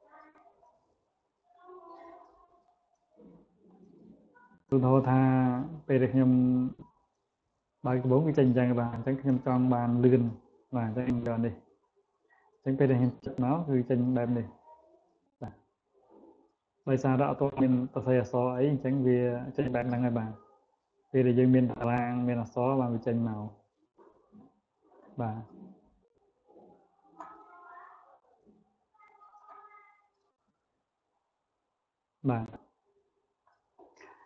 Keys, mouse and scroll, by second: 0.3 click, 1.4 click, 2.0 click, 3.1 click, 9.9 click, 11.5 click, 12.7 click, 24.1 click, 25.1 click, 25.5 click, 26.1 scroll up 1, 30.2 click, 33.2 click, 34.1 click.